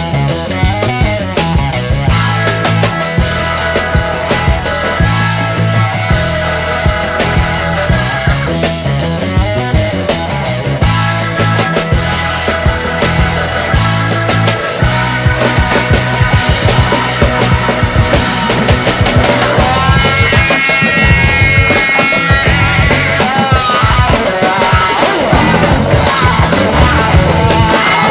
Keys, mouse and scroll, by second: 0.0 shift+Left, 0.9-3.1 drag, 4.2 click, 5.3-5.6 drag, 6.5 shift+Right, 7.7-9.9 drag, 11.1 ctrl+s, 12.3 ctrl+s, 12.5 space, 15.4-16.3 scroll up 1, 16.3-16.7 scroll down 2, 24.8-25.2 scroll down 2.